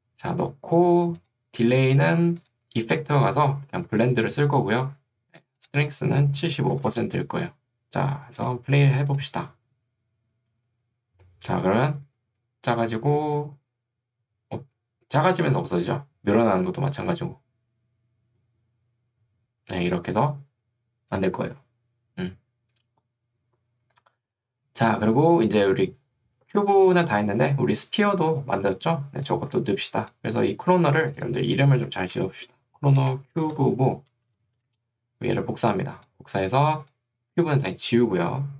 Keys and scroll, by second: 3.9 ctrl+2, 4.9 Escape, 6.5 7, 6.9 Return, 26.7 ctrl+2, 27.5 Escape, 28.5 ctrl+2, 29.5 Escape, 31.9 Right, 33.2-34.2 typing.